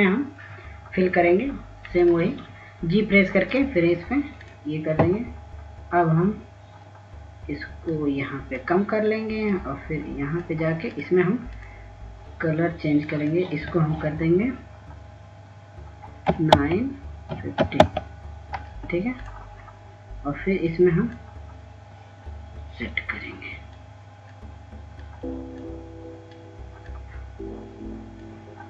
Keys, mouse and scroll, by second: 0.0-0.4 scroll down 1, 1.2 click, 7.3-9.9 scroll down 1, 9.9 click, 11.6-16.3 drag, 18.4 KP_9, 18.7 Tab, 19.4 KP_5, 19.7 KP_0, 19.9 Tab, 21.3 click, 24.7-25.5 scroll up 1, 25.9 click.